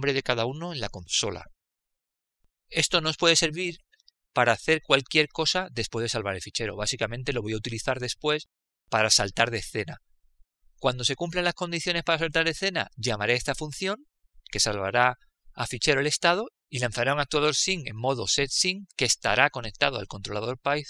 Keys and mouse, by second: 1.3-4.8 drag, 10.8 click.